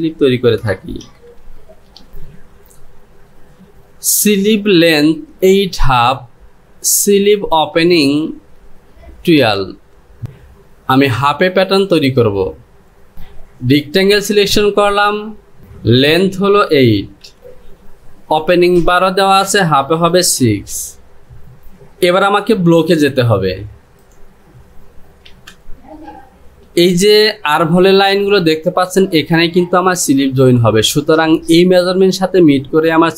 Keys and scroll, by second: 1.9 ctrl+shift+z, 17.3 KP_8, 21.0 KP_6, 23.3 j.